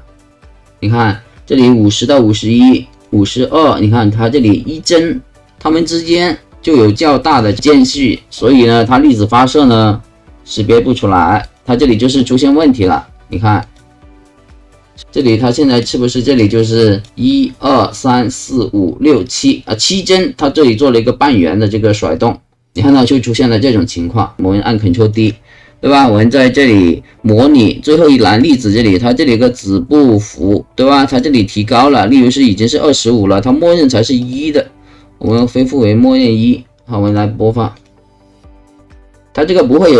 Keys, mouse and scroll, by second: 2.9 click, 11.4 click, 12.5 click, 13.6 click, 15.2 click, 15.7 click, 16.5 click, 22.9-24.3 drag, 28.4 click, 29.5 click, 31.1 click, 34.2 right click, 35.3 click, 37.1 click, 37.7 click.